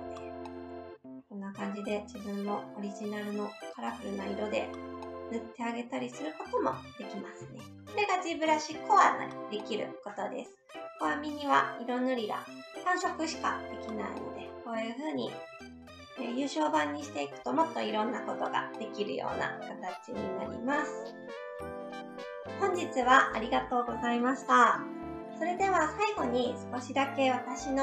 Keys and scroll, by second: 1.5 s.